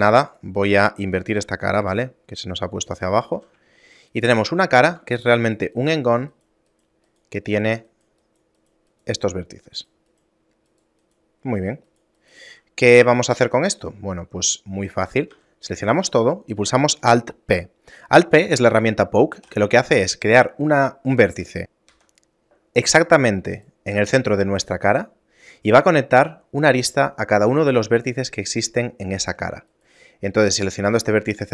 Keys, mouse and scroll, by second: 0.0 ctrl+Tab, 0.6 right click, 1.8 ctrl+f, 3.4 a, 3.8 shift+middle click, 4.1 right click, 5.0 ctrl+Tab, 5.8 right click, 7.2 right click, 7.6 right click, 8.4 right click, 9.8 right click, 11.6 right click, 12.6 a, 13.3 shift+middle click, 15.4 a, 19.6 alt+p, 23.7 right click, 25.2 shift+middle click, 29.0 shift+middle click, 29.8 right click.